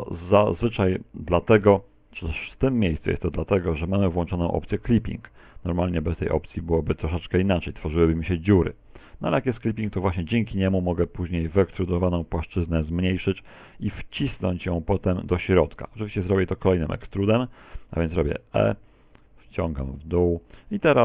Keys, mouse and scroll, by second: 8.1 click, 9.4 s, 14.9 click, 16.3 middle click, 17.7 click, 19.0 click, 19.5 ctrl+z.